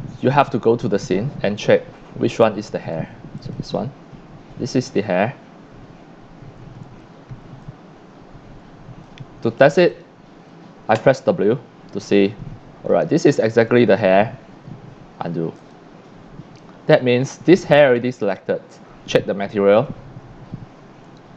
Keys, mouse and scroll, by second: 3.4 click, 7.0 scroll down 3, 7.4 c, 7.6-9.0 drag, 9.9 click, 10.9 w, 12.0-12.9 drag, 14.0-14.4 drag, 15.5 click, 18.4 click, 19.7 click.